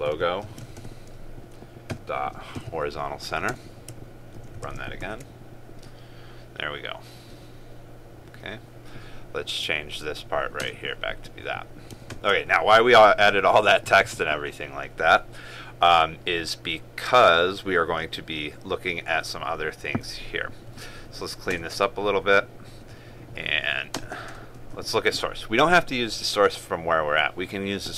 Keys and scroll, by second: 0.9 ctrl+space, 4.6 ctrl+s, 5.2 ctrl+r, 12.2 ctrl+/.